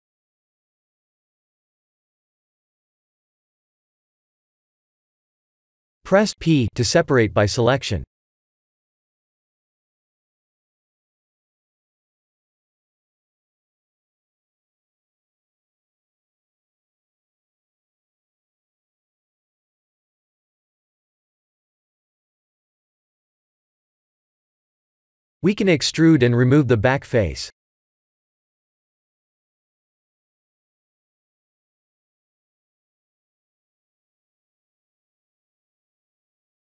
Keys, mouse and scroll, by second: 1.1 l, 2.7 click, 2.9 right click, 3.6 click, 4.2 3, 4.4 2, 5.7 l, 8.9 Tab, 9.4 click, 10.6 click, 11.6 Tab, 12.7 1, 13.5 click, 14.7 shift+click, 15.5-16.1 scroll up 4, 16.0 shift+middle click, 17.1 shift+click, 17.4 f, 18.0 middle click, 19.8 Tab, 20.4 middle click, 21.3 scroll down 4, 21.9 middle click, 25.1 Tab, 25.4 a, 26.0 e, 27.9 middle click, 35.0 middle click, 35.6 Tab, 36.1 middle click.